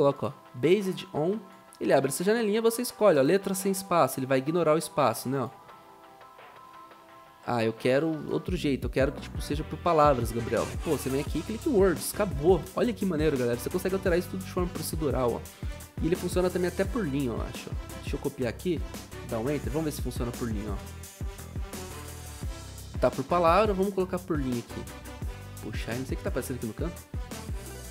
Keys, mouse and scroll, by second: 18.0 Right, 18.0 ctrl+a, 18.2 ctrl+c, 18.8 Return, 19.1 ctrl+v, 20.6 0, 25.4 typing.